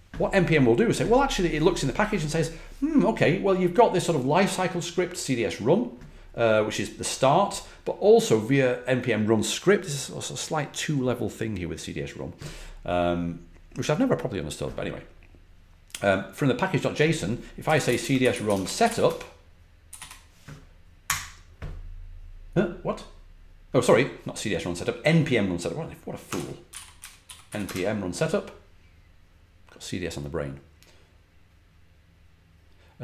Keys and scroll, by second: 17.3-21.0 typing, 26.0-27.9 typing.